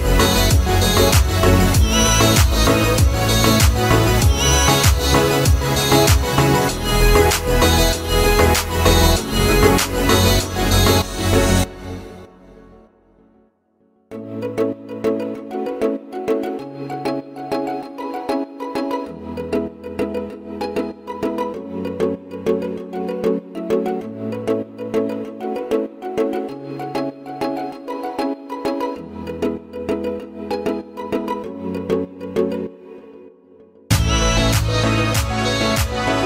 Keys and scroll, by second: 0.8 Escape, 9.6 Escape, 18.8 Escape, 20.5 Escape, 28.3 3, 29.5 Return, 31.2 Escape.